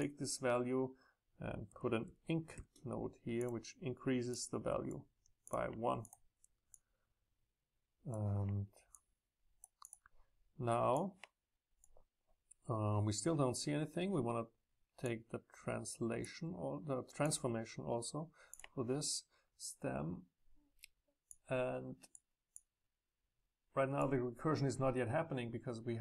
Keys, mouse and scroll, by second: 0.0-2.0 drag, 3.4-6.0 drag, 11.0 click, 11.2 click, 11.3-13.6 drag, 15.1-20.5 drag, 21.3-26.0 drag, 22.6 Up.